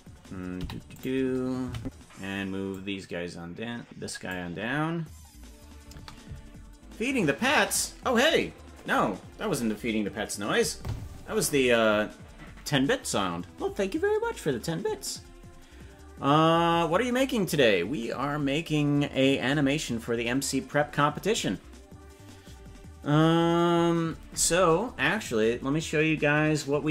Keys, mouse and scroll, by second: 0.6 i, 1.7 Right, 2.7-4.4 drag.